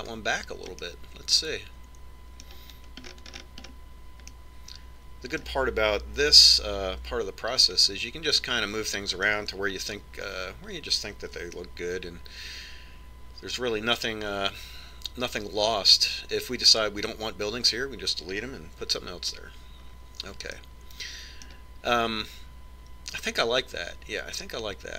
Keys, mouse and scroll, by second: 2.6-4.3 middle drag, 4.8-5.2 scroll up 1, 5.2-7.9 middle drag, 8.2 KP_5, 8.7-10.2 middle drag, 11.2 middle click, 12.2-13.4 scroll up 1, 13.4-15.1 middle drag, 21.3-24.1 middle drag.